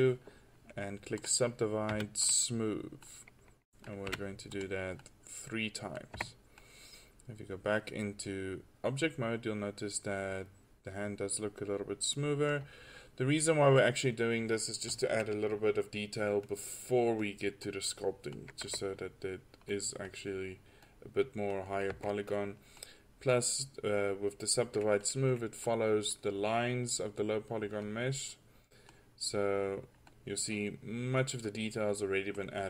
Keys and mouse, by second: 1.3-3.0 drag, 1.9 w, 4.1 w, 6.1 click, 6.2 Tab, 12.6-16.4 middle drag, 16.4-17.6 drag, 17.8 click, 18.7 Tab, 21.9 Tab, 22.0 Tab, 28.6-30.0 middle drag, 30.0-31.2 drag, 31.5-31.9 drag, 31.9 middle click.